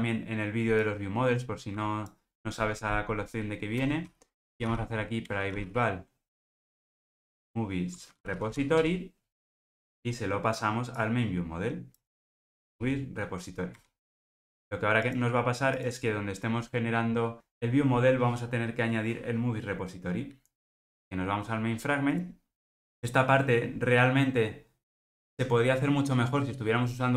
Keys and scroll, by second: 5.3 Return, 13.9 Return.